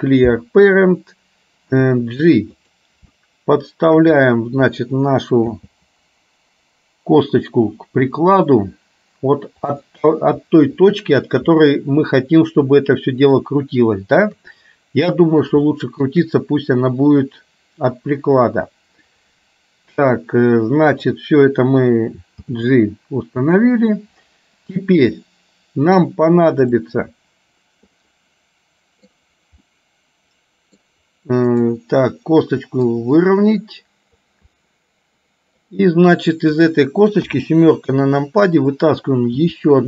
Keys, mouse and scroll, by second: 1.8 g, 3.1 shift+middle click, 5.6 g, 11.6-14.4 middle drag, 11.6-12.8 scroll up 1, 12.8-13.4 scroll up 1, 13.4-14.4 scroll down 1, 14.4 KP_3, 15.8 middle click, 22.5 g, 28.1-29.3 middle drag, 29.8-30.9 middle drag, 31.6 click, 33.0-34.3 drag, 34.6-35.6 middle drag, 36.6 click, 37.4 KP_7, 39.5 e.